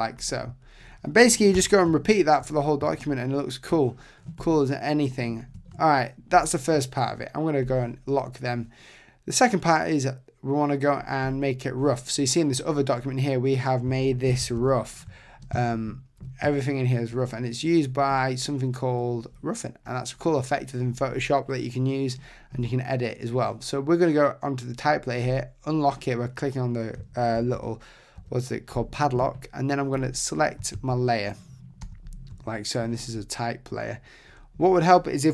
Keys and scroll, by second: 1.5 super+0, 5.6 Tab, 14.3 super+=, 27.4 super+=, 30.7 super+z, 31.8 super+0.